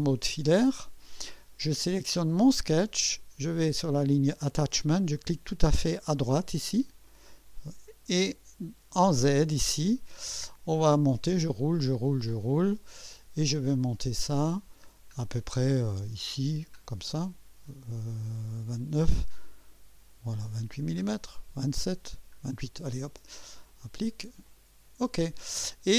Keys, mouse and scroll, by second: 0.2 2, 5.4 click, 7.0 click, 10.4-10.8 scroll up 2, 11.6 scroll up 2, 12.2-15.2 scroll up 8, 15.5 scroll up 1, 16.1-16.7 scroll down 1, 18.0 scroll down 1, 19.0 scroll up 2, 19.9 scroll down 2, 20.5 scroll down 2, 22.1 scroll up 2, 23.7 click, 24.5 click.